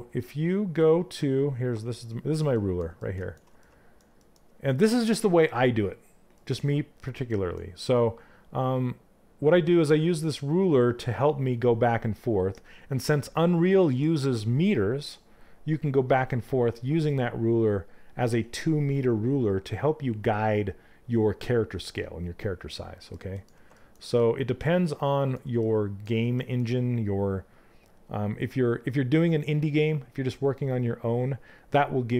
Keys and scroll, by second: 0.4 f.